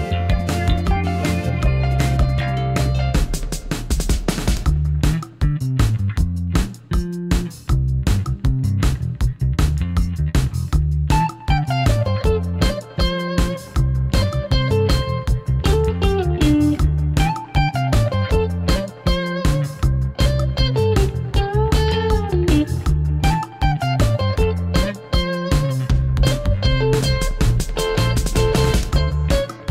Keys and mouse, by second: 0.6 x, 4.6 2, 5.9 click, 6.6 g, 6.9 x, 7.9 drag, 8.8 g, 9.1 x, 10.7 click, 11.2 f, 11.6-12.3 shift+middle drag, 13.1 click, 13.7 g, 13.9 x, 14.9 shift+click, 15.3 middle click, 16.1 middle click, 16.8 g, 17.1 x, 18.3 click, 18.5 f, 19.5-20.2 middle drag, 20.4 click, 20.6-22.6 middle drag, 23.2-25.3 middle drag, 25.3 Tab, 25.5 g, 26.1 y, 29.3-29.7 middle drag.